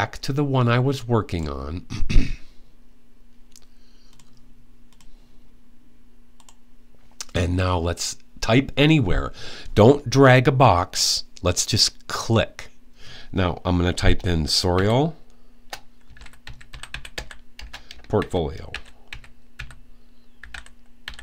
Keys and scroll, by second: 14.5 typing, 15.6-21.2 typing.